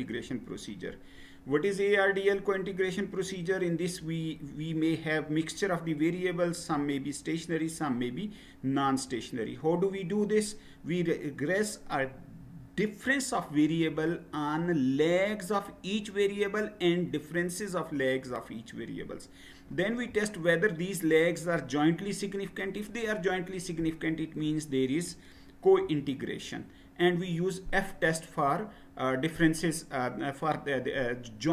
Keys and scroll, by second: 0.3 Right, 2.9 Down, 8.8 Down, 25.9 Down.